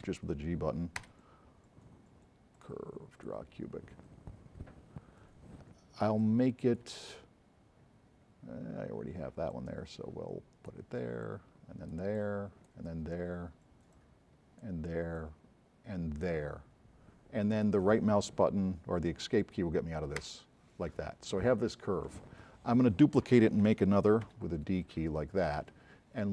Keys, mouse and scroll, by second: 0.1 g, 1.1 Escape, 2.6 click, 3.2 click, 4.2-4.8 scroll up 2, 6.2 click, 6.2 s, 9.5 click, 13.0 middle click, 20.4 Escape, 24.4 d.